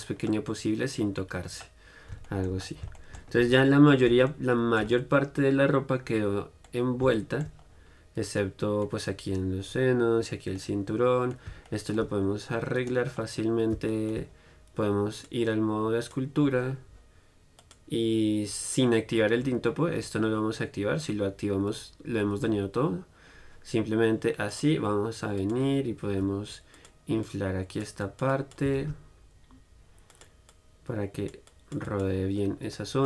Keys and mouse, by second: 3.6 Tab, 11.3 click, 11.3 middle click, 13.0 right click, 13.4 middle click, 13.5-15.1 right drag, 14.2 middle click, 16.3-27.0 drag, 26.4 f, 27.1-30.6 drag, 29.6 shift+f, 32.9 middle click.